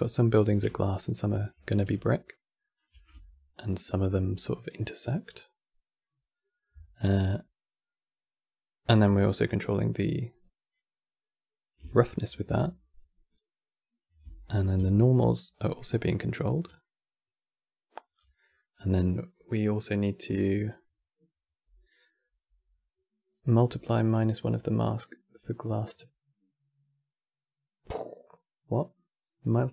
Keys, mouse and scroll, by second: 7.6-8.9 middle drag, 8.9 click, 11.6 ctrl+shift+click, 14.1 ctrl+shift+click, 15.8-19.5 middle drag.